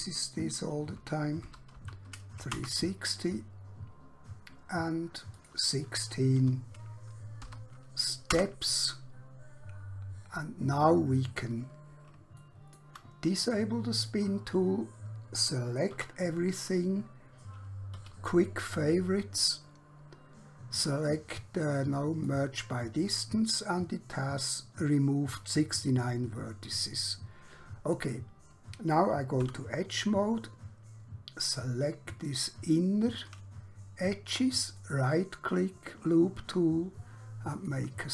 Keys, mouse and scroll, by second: 1.0-1.7 typing, 2.6 Return, 5.4 click, 6.4-7.4 typing, 8.4 Return, 11.1 scroll down 1, 11.6-12.0 scroll up 1, 12.4 shift+middle click, 14.0 click, 16.0 a, 18.0 q, 22.2 click, 26.8 click, 28.0-29.4 scroll up 1, 29.4 2, 32.2 click, 34.8 right click, 37.6 click.